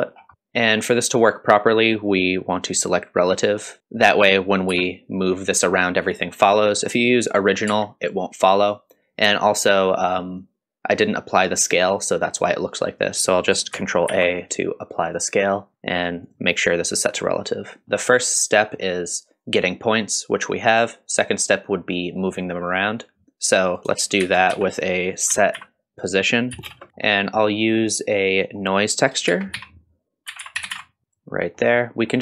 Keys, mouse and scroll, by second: 0.1 scroll down 2, 0.3-2.6 middle drag, 0.3-0.9 scroll up 1, 3.6 click, 3.8 middle click, 4.1 click, 4.7 g, 7.1 click, 7.7 g, 14.1 ctrl+a, 16.2-17.8 drag, 17.8-23.7 middle drag, 23.7 click, 24.2 shift+a, 26.9-27.5 middle drag, 26.9 scroll down 1, 27.8 click, 29.3 shift+a, 31.4 middle click.